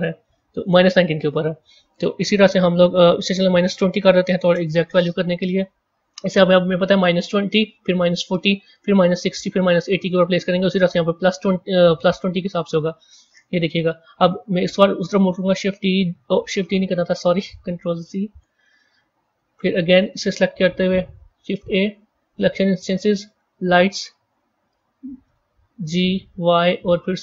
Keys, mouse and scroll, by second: 0.4-3.6 drag, 12.9 click, 15.6 shift+d, 18.0 ctrl+z, 19.8 click, 20.8 shift+a, 25.1 g.